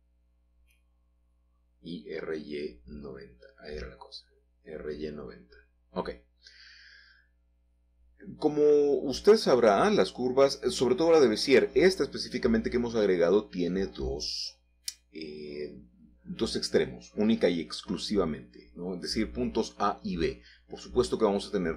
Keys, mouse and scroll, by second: 0.2 Escape, 2.3-3.2 typing, 3.7 Return, 4.5 Tab, 6.5-7.4 scroll down 3, 7.0-7.3 typing, 7.1 middle click, 7.3 middle click, 9.0 Tab, 9.2 typing, 9.3-10.2 scroll up 2, 10.2 s, 11.2 click, 11.9 g, 12.5 z, 15.4 click, 15.9-18.0 middle drag, 19.6-21.4 typing.